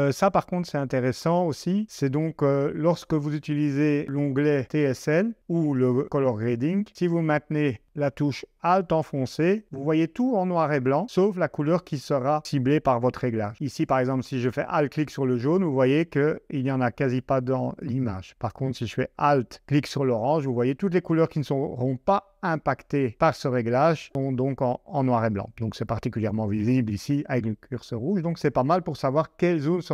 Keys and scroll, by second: 4.7 shift+super+Tab.